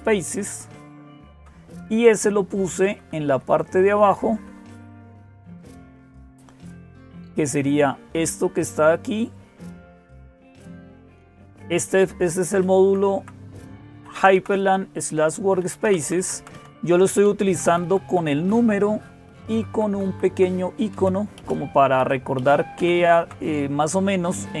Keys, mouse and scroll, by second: 0.0-24.6 typing, 0.3-1.2 Down, 2.0 Page_Down, 2.2 Page_Down, 2.5 Page_Down, 2.7 Page_Down, 3.3 Page_Down, 3.9 Page_Down, 4.1 Page_Down, 5.6-8.0 Up, 8.3-9.6 Up, 10.8 Down, 11.0 Down, 11.1 Down, 12.6 Down, 13.0 Down, 14.0 Down, 14.2 Down, 15.7 Down, 15.9 Down, 16.0 Down, 16.2 Down, 17.1 Right, 17.3 Right, 17.5 Right, 17.7 Right, 17.9 Right, 18.4 Right, 19.1 Right, 19.3 Right, 19.5 Right, 19.7 Right, 19.9 Right, 20.7 Left, 21.2 Right, 21.8 Left, 22.2 Right, 22.6 Down.